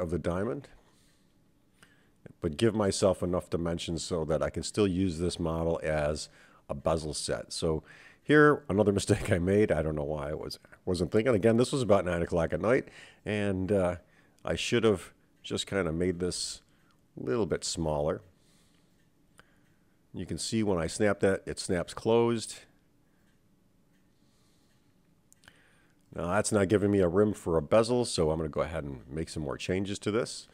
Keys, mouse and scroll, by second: 1.3 click, 1.7 g, 3.3 click, 3.7 g, 6.0 click, 6.3 g, 8.0 click, 8.4 g, 10.3 click, 10.7 g, 12.3-12.9 scroll down 2, 12.9-13.4 scroll up 2, 13.8 click, 14.2 g, 21.9-23.1 right drag, 23.4 scroll down 1, 23.6-27.2 middle drag, 29.7 KP_7.